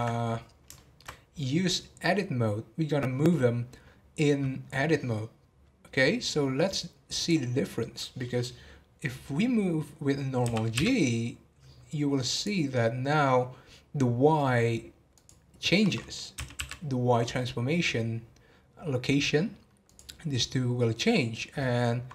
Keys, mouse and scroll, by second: 0.3 scroll down 2, 0.7-4.2 shift+middle drag.